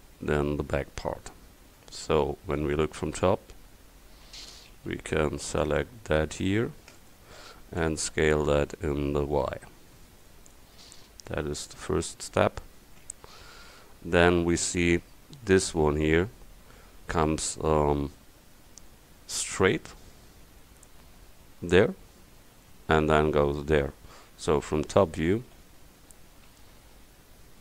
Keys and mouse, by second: 2.0-3.6 middle drag, 3.6 KP_7, 4.5 a, 5.0 c, 7.0-9.0 drag, 8.0 s, 10.9 click, 12.2 middle click, 25.6 KP_7.